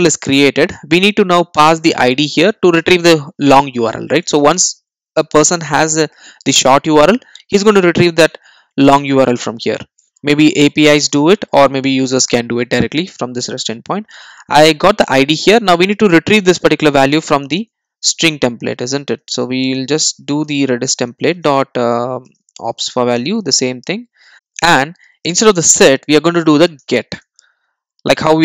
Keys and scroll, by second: 20.8 Return, 24.3 super+z, 26.8 Return.